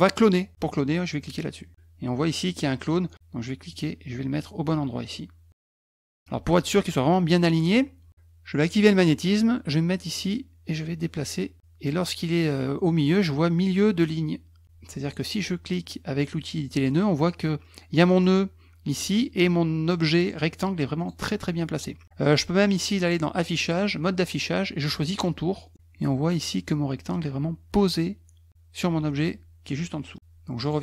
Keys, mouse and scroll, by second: 3.7-5.5 drag, 5.8 scroll up 1, 6.0 middle click, 8.7 click, 10.1-14.6 drag, 15.0 click, 16.6 click, 20.2 click, 21.0 click, 22.5 click, 25.1 click, 30.6 click.